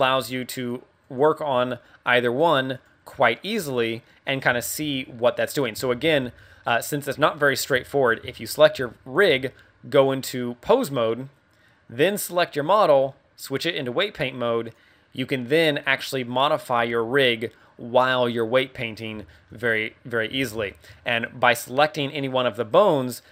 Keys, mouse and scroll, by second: 0.0 r, 0.7 right click, 1.0 right click, 1.5 r, 2.8 right click, 3.2 right click, 3.6 r, 4.4 right click, 4.6 shift+middle click, 4.8 middle click, 5.9 ctrl+Tab, 6.2 z, 6.5 middle click, 7.0 a, 7.3 right click, 7.9 middle click, 8.2 z, 8.3 middle click, 8.7 z, 9.2 z, 10.7 click, 12.3 right click, 13.5 click, 14.6 click, 16.7 r, 18.1 right click, 18.3 middle click, 19.2 shift+middle click, 19.8 scroll down 2, 20.3 KP_1, 20.6 shift+middle click, 22.6 right click.